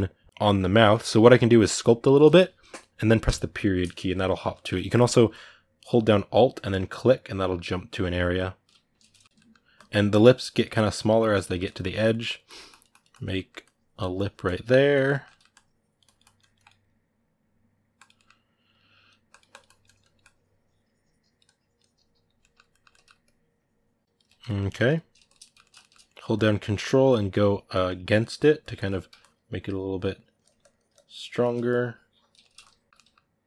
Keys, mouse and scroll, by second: 1.4-3.0 drag, 3.0 KP_Decimal, 3.5-6.5 middle drag, 7.3 alt+middle click, 8.1 alt+middle click, 9.0 ctrl+middle click, 9.5-10.9 drag, 10.9-12.2 shift+middle drag, 12.2 click, 13.1 middle click, 13.4-14.9 drag, 14.9 ctrl+middle click, 15.3-16.5 drag, 16.5 right click, 17.1 click, 17.7 click, 17.9-19.1 middle drag, 19.1-22.2 drag, 22.2 ctrl+middle click, 23.0-24.0 drag, 24.2 ctrl+middle click, 25.0 shift+click, 25.2 ctrl+middle click, 26.1 ctrl+click, 26.6 ctrl+middle click, 26.9-28.7 ctrl+drag, 28.7 middle click, 29.0-31.1 ctrl+drag, 31.1 ctrl+middle click, 31.4 shift+click, 32.2 ctrl+middle click, 32.4 shift+click, 32.9 middle click.